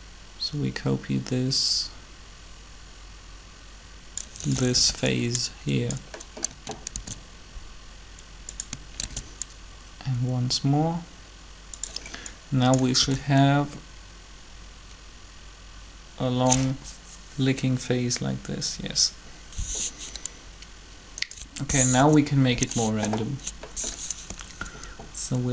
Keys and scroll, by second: 4.7 b, 8.1 shift+d, 9.0 shift+d, 13.0 alt+a, 21.8 3, 24.2 Up, 24.4 Up.